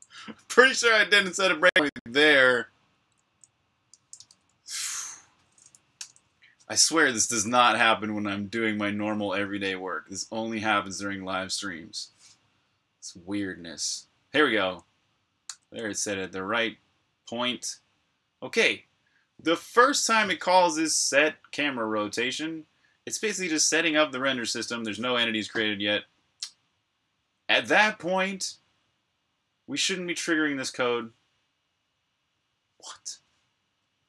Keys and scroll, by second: 4.1 super+Tab, 5.8 super+\, 6.6-8.0 typing, 7.8 super+o, 10.0 Return.